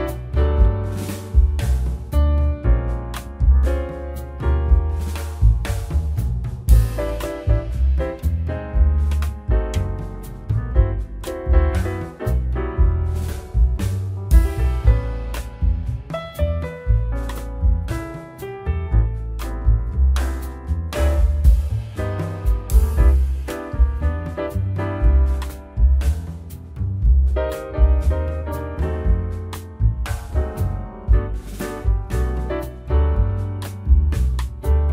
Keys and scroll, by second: 1.8 z, 2.9 1, 12.5 z, 17.9 ctrl+s, 21.6 shift+a, 23.7 1, 24.4 6, 24.8 Return, 29.3 9, 29.4 0, 29.7 Return, 32.6 shift+Tab, 33.1 s.